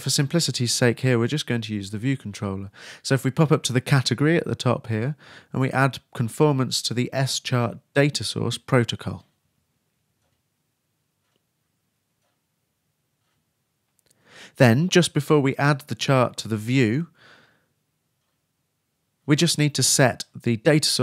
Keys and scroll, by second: 4.8 shift+space, 5.8 shift+,, 9.0-10.2 typing, 12.3 shift+Return, 12.7 shift+/, 12.7 shift+BackSpace, 13.1 shift+BackSpace.